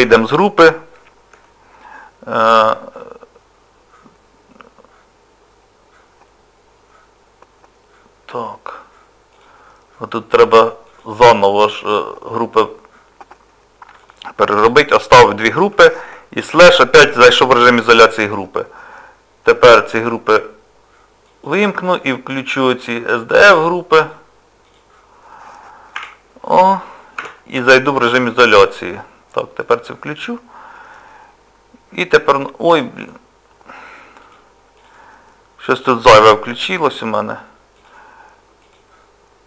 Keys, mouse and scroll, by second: 9.3 click, 10.9 click, 14.0 click, 14.8 click, 15.4 shift+click, 15.5 shift+click, 16.6 KP_Divide, 21.3 click, 23.6 click, 26.0 a, 27.2 KP_Divide, 29.9 click, 31.1 middle click, 34.2 click, 34.8 click, 36.2 z, 37.8 click, 38.6 click.